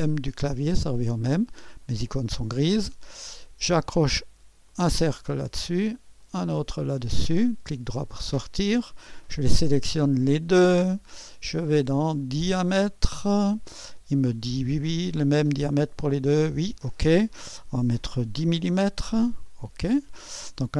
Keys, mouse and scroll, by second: 2.7-5.6 drag, 6.2-7.7 drag, 7.7 middle click, 7.9 click, 8.0 click, 8.2 right click, 8.4 click, 10.2 click, 11.9 click, 13.1 click, 15.9-17.0 drag, 18.1-19.0 typing, 19.4-20.7 drag.